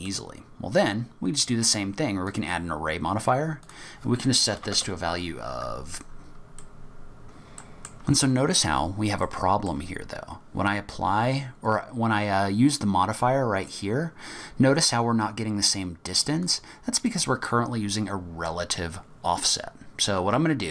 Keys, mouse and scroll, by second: 1.3 click, 3.7 click, 6.6 middle click, 7.2 click, 7.6 middle click, 9.2 middle click, 10.1-10.7 scroll down 3, 16.4 click.